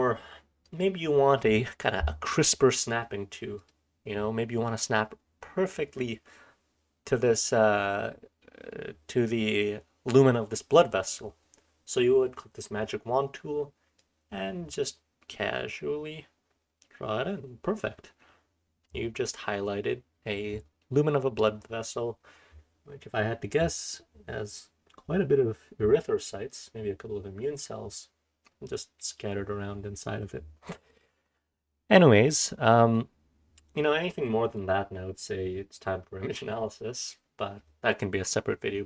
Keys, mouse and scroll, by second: 0.6 click, 0.6-2.5 scroll up 1, 2.5-3.5 scroll down 1, 4.1-4.8 scroll down 2, 4.8-5.3 scroll down 1, 5.3-14.1 scroll up 2, 14.1-18.9 drag, 14.1-18.9 scroll up 1, 18.9-20.5 scroll up 1, 20.5-21.3 scroll up 1, 21.3-26.8 scroll up 1, 26.8-27.7 scroll up 1, 27.7-28.4 scroll down 2, 28.4-30.8 scroll down 1, 30.8-32.2 scroll down 1, 32.2-35.9 scroll down 1, 35.9-38.8 scroll down 1.